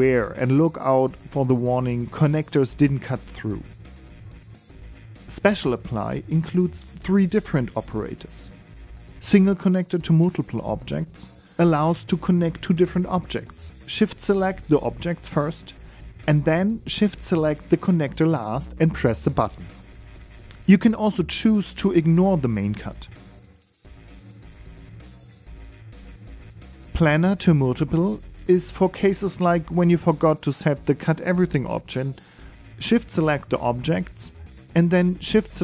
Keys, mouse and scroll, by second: 5.1 right click, 5.5 right click, 6.9 shift+right click, 10.0 alt+a, 10.5 n, 11.8 click, 13.9 right click, 14.8 shift+right click, 16.2 right click, 19.8 click, 21.9 ctrl+z, 22.8 click, 23.5 click, 24.4 middle click, 25.1 right click, 25.5 g, 26.4 middle click, 27.1 shift+middle click, 27.1 scroll up 2, 27.4 middle click, 30.4 right click, 30.8 right click, 31.2 right click, 33.5 right click, 33.9 right click, 34.4 right click, 35.1 shift+right click, 35.5 shift+right click.